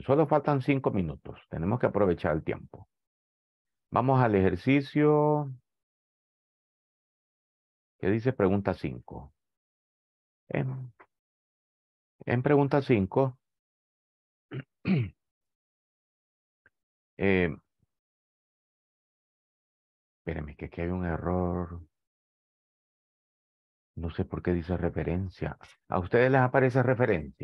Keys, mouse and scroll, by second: 9.1 click.